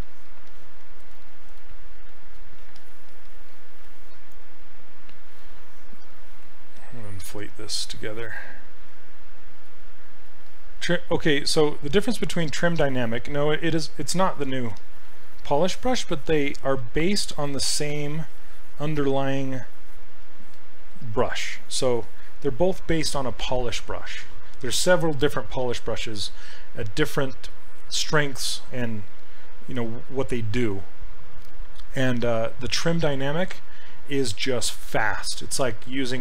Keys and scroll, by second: 6.8 s, 11.3 s.